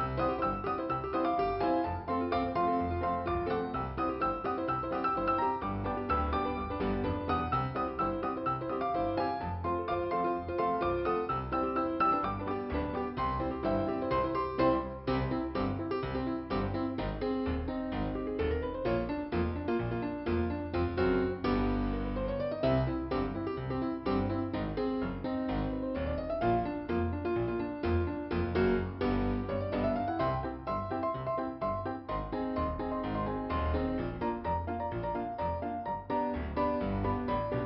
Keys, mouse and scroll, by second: 0.6 click, 1.9 click, 5.5 click, 7.5 p, 8.2 scroll down 2, 9.4 middle click, 9.8-10.9 scroll up 2, 11.0 click, 15.9 alt+i, 17.7-18.7 scroll up 1, 18.7 click, 20.5 click, 22.4 click, 23.9 click, 24.1 click, 25.2 click, 25.3 click, 27.9 click, 32.0 click, 34.7 p, 35.7-36.1 scroll down 2, 37.5 middle click.